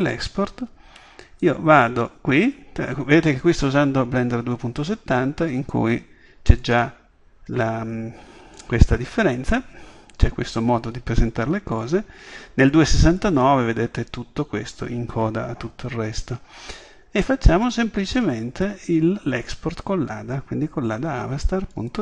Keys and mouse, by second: 0.6-6.6 middle drag, 6.6-8.6 drag, 8.6-10.2 middle drag, 10.2-17.3 drag, 17.3 middle click, 17.7-19.4 drag, 19.7-22.0 middle drag.